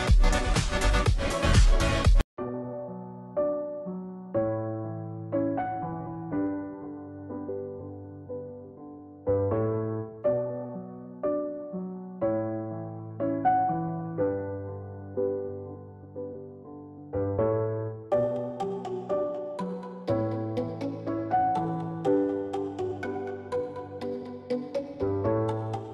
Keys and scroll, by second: 9.4 ctrl+z, 10.3 [, 10.5-11.3 [, 14.2 [.